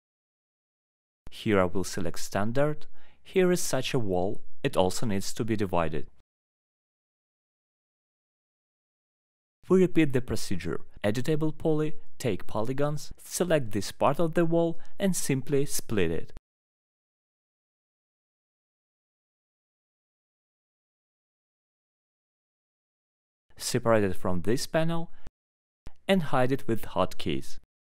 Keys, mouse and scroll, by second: 0.4 alt+middle click, 0.4-0.8 scroll, 1.8 click, 2.4 click, 3.0 middle click, 3.6 click, 4.3 alt+middle click, 5.7 alt+middle click, 5.9 middle click, 6.4 alt+middle click, 7.4 click, 7.9 alt+middle click, 8.3 right click, 10.0 click, 10.5 middle click, 13.0-13.4 scroll, 13.9 alt+middle click, 14.6 click, 15.5 alt+middle click, 17.3 ctrl+click, 18.0 alt+middle click, 21.4 click, 21.8 click, 23.1 click, 23.6 alt+middle click, 25.1 right click, 25.2 click, 25.7 click, 27.8 click.